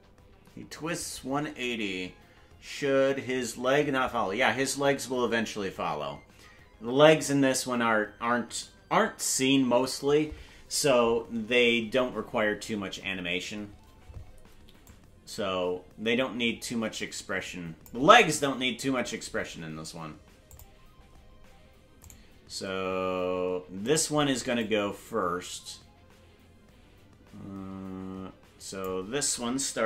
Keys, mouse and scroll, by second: 11.6 scroll down 1, 14.8-17.8 drag, 14.8 scroll down 2, 18.2-18.8 scroll down 1, 18.9-19.4 scroll down 1, 19.8-20.4 scroll up 1, 20.4 click, 21.1-21.5 scroll down 1, 22.1 right click, 22.1-22.4 scroll down 1, 24.5-28.8 drag.